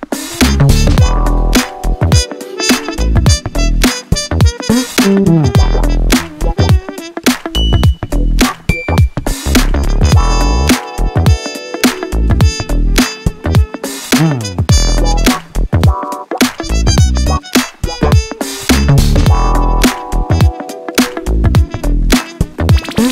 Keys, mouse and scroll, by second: 2.1 click, 2.7 click, 3.8 click, 5.0 click, 6.7 click, 7.4-8.7 drag, 9.5 click, 10.7 click, 11.8 ctrl+z, 14.1 s, 15.9 click, 16.6-18.1 drag, 18.9 click, 19.6 click, 19.9 click, 20.7 s, 22.1-22.4 scroll down 2, 22.4-22.8 scroll up 1, 23.0 click.